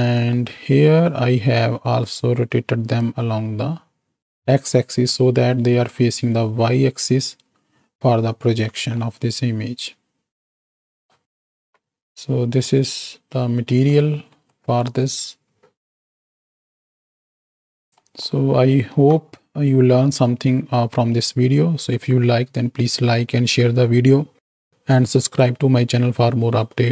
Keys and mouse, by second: 2.2-3.1 drag, 4.7 middle click, 8.4 alt+a, 9.1-11.2 middle drag, 11.6 z, 12.6 click, 13.8 click, 14.6 click, 18.1 click, 19.4 alt+a, 19.4-26.6 drag.